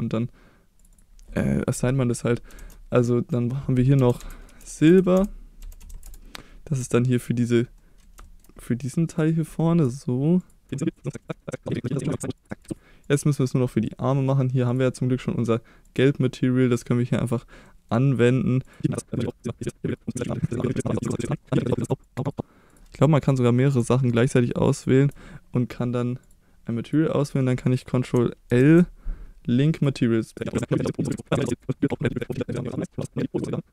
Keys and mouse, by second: 0.8-6.5 drag, 4.2 BackSpace, 6.9 shift+middle click, 7.8 middle click, 8.3 shift+middle click, 9.2 click, 10.4 shift+click, 10.7 middle click, 11.1 middle click, 11.5 middle click, 12.0 click, 12.2 middle click, 12.4 click, 12.7 Tab, 13.1 click, 14.8-16.0 drag, 16.4 middle click, 17.7 middle click, 18.7 click, 19.3 click, 19.6 click, 20.0 middle click, 20.2 click, 20.6 click, 20.9 click, 21.1 click, 21.8 click, 22.1 click, 22.4 click, 24.6 shift+click, 26.2 click, 27.2 middle click, 28.5 ctrl+l, 30.4 middle click, 30.9 click, 31.1 middle click, 31.8 click, 31.9 middle click, 32.6-33.7 drag.